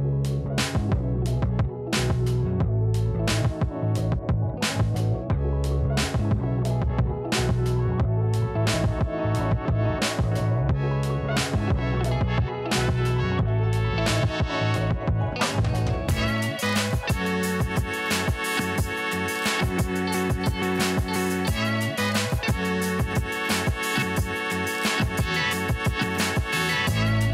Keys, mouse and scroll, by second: 0.2-0.6 scroll up 1, 0.6 click, 1.7-2.9 scroll up 1, 2.9-8.0 drag, 11.3 click, 17.4 click, 19.1-19.7 scroll down 1, 19.7-23.3 drag, 23.3-24.1 scroll up 1, 24.9-27.3 drag.